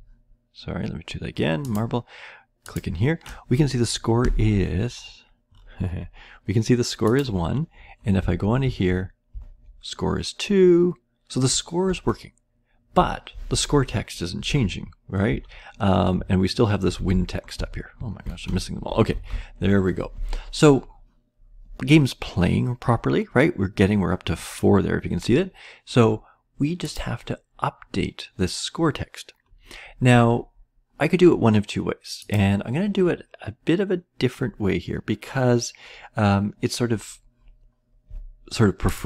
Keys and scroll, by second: 8.2 Down, 8.6 Right, 9.3 Left, 11.4 Right, 13.4 Up, 13.8 Right, 14.4-15.2 Down, 15.2 Left, 15.9 Left, 15.9 Left, 16.1-17.1 Right, 17.1 Up, 17.1 Left, 17.9 Up, 17.9 Right, 18.5 Right, 19.1 Up, 19.1 Right.